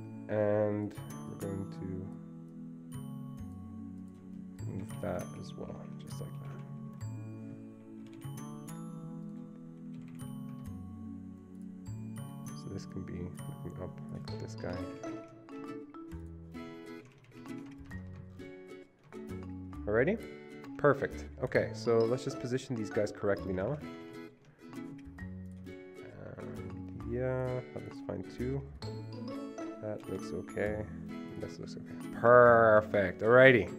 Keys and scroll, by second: 4.9 Right, 5.0 Right, 5.2 Right, 5.3 Up, 5.5 Up, 5.8 Up, 5.9 Up, 6.4 Down, 6.6 Down, 6.8 Right, 7.0 Right, 8.1 Right, 8.2 Right, 10.1 Right, 10.2 Right, 10.6 Escape, 14.8 ctrl+Up, 15.0 ctrl+Up, 15.1 ctrl+Up, 15.2 ctrl+Up, 15.3 ctrl+Up, 18.0 Escape, 23.7 ctrl+Left, 23.8 ctrl+Left, 24.0 ctrl+Left, 24.2 ctrl+Left, 30.1 ctrl+Left, 30.3 ctrl+Left, 33.4 Escape, 33.7 Escape.